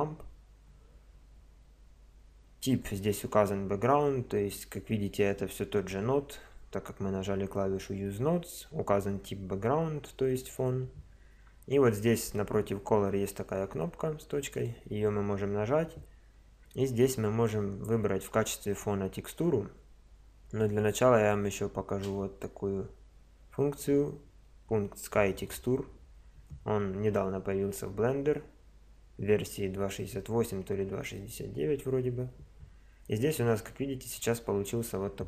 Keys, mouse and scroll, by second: 0.0 Escape, 14.6 click.